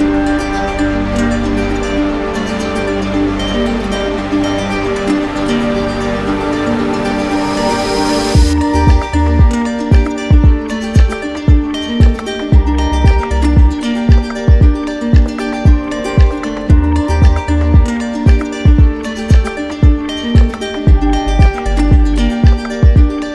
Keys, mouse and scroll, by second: 1.0 shift+click, 1.5 alt+click, 2.1 right click, 2.9 right click, 3.0 right click, 3.7 right click, 4.9 alt+click, 5.2 ctrl+z, 6.9 click, 7.8 alt+right click, 8.4 right click, 9.2 right click, 10.3 right click, 10.9 z, 11.9 z, 13.2 click, 14.1 alt+right click, 14.7 right click, 15.0 shift+right click, 16.0 right click, 18.8 click, 19.1 ctrl+z, 22.4 click, 22.6 ctrl+z.